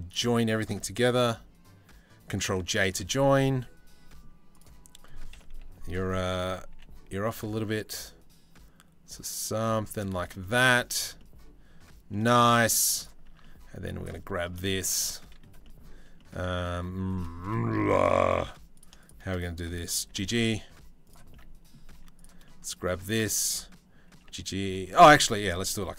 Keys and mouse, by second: 2.3 ctrl+j, 4.9 KP_7, 5.5 KP_3, 6.3 g, 9.6 shift+middle drag, 10.0-10.4 middle drag, 10.8-11.8 middle drag, 11.9 shift+middle click, 12.1 middle drag, 12.5 middle drag, 12.9 Tab, 13.4 middle click, 14.3 shift+middle click, 14.5 middle click, 15.8 middle click, 16.4 2, 16.8 click, 17.1 click, 18.3 click, 18.6 shift+click, 19.7 g, 20.9 click, 21.2 middle click, 21.6 1, 23.7 g, 24.9 ctrl+z, 25.1 ctrl+z, 25.5 ctrl+z, 25.8 ctrl+z.